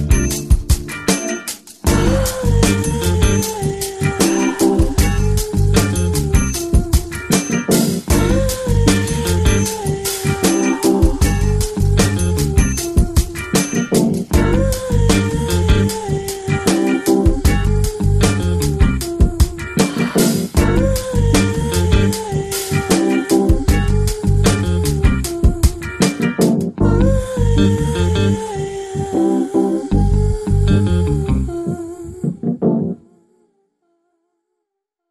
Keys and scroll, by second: 17.8 x, 18.6 [.